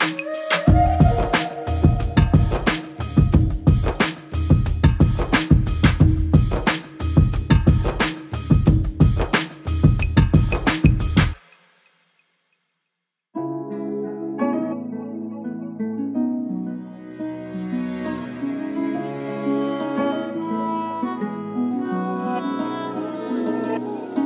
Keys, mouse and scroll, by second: 0.1 shift+middle click, 0.7 click, 2.2 click, 2.8 Tab, 3.1 a, 4.0 r, 4.4 Tab, 4.9 click, 5.0 click, 5.6 drag, 6.1-6.4 middle drag, 6.4 scroll down 2, 6.6 KP_3, 6.9-7.3 scroll up 1, 7.8 click, 8.6 click, 9.8 click, 10.7 click, 12.3-13.3 drag, 13.9-15.4 drag, 15.7 click, 15.9 KP_5, 16.5-17.3 drag, 17.4-18.2 drag, 18.3-19.6 drag, 19.8 click, 20.2-20.8 middle drag, 20.8 KP_1, 21.4 click, 21.8 click, 22.6-24.1 drag, 24.1 alt+z.